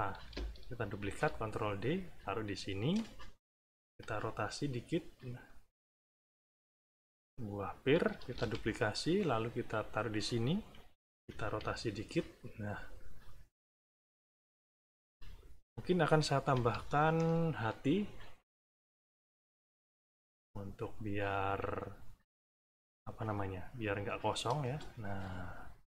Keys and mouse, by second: 0.9 ctrl+d, 1.6 ctrl+click, 3.4 ], 4.6 click, 5.7 click, 7.1 click, 8.2 ctrl+d, 8.8-10.3 ctrl+drag, 11.1 [, 12.0 click, 13.4 click, 14.5 click, 15.6 middle click, 16.4 =, 16.9 middle click, 18.3 click, 19.4 click, 20.3 click, 20.7 click, 22.0 click, 22.8 click, 23.7 click, 24.6 space.